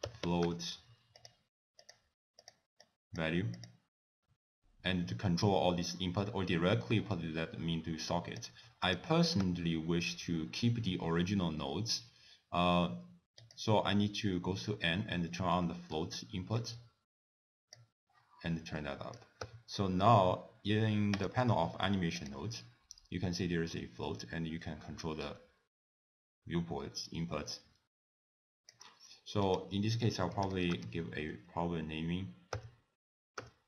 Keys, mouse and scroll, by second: 1.9 click, 2.9 click, 3.6 click, 6.9 click, 8.9 click, 9.5 n, 13.4 click, 15.7 middle click, 16.1 scroll up 1, 16.7 click, 18.8 middle click, 19.5 n, 21.2 click, 22.2 click, 23.9 click, 29.5 click.